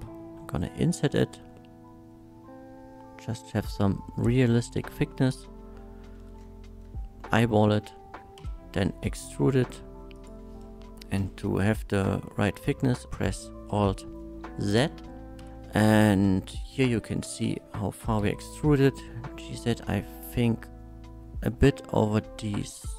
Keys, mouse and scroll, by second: 0.3 i, 4.6 shift+click, 5.3 shift+middle click, 6.1 shift+middle click, 8.4 e, 10.1 click, 11.2 KP_1, 13.0 alt+z, 14.2 shift+middle click, 15.4 n, 18.2 g, 18.5 z, 19.7 g, 19.7 z.